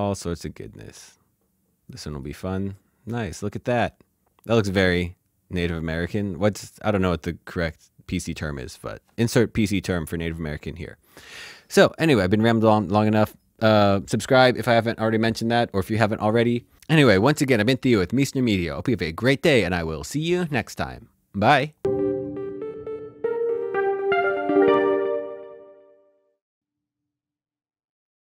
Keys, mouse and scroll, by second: 2.1 click.